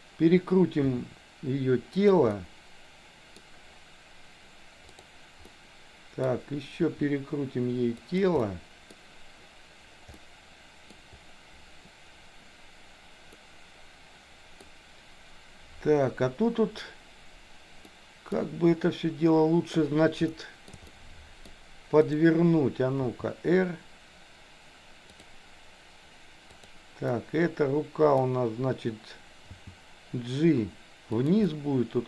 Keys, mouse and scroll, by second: 0.9 r, 2.3-3.4 middle drag, 5.5 middle click, 6.8 r, 8.4 middle click, 10.1 middle click, 13.4-14.7 middle drag, 17.9 middle click, 20.4 shift+middle click, 20.9 middle click, 22.0 click, 23.0 r, 26.6 click, 27.2-28.3 middle drag, 29.5 g, 31.5-32.0 middle drag.